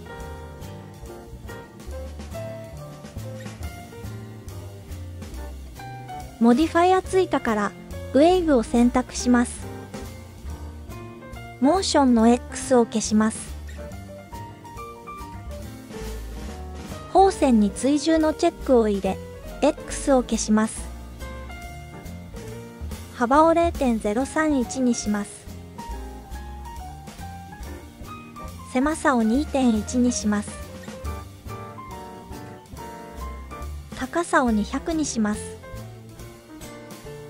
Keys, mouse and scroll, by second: 0.2 scroll down 1, 0.7-1.2 drag, 0.7 scroll down 1, 2.8 click, 4.1 click, 8.0 click, 11.6 click, 13.8-14.4 shift+middle drag, 16.9 click, 18.3 click, 19.1 shift+scroll up 1, 19.1-20.1 shift+middle drag, 23.2-27.3 drag, 28.4-32.6 drag, 33.8-36.4 drag, 35.3 KP_0.